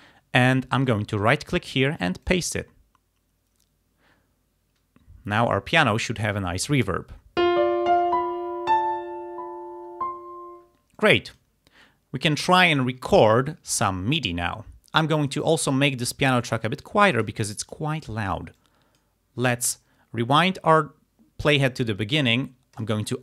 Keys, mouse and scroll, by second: 0.9 right click, 2.3 click, 11.0 click, 16.1-17.7 drag, 18.6 click, 22.8 click.